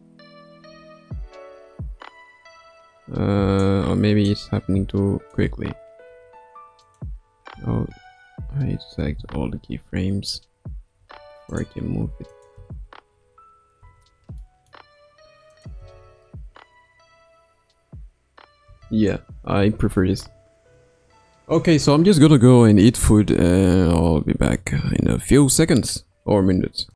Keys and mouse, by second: 4.2-5.3 drag, 6.1 g, 7.8 ctrl+z, 9.1 a, 10.9 g, 12.3 click, 12.5 space, 13.7 space, 14.4-14.7 middle drag, 15.5 click, 15.8 space, 18.6 space, 19.9 ctrl+s.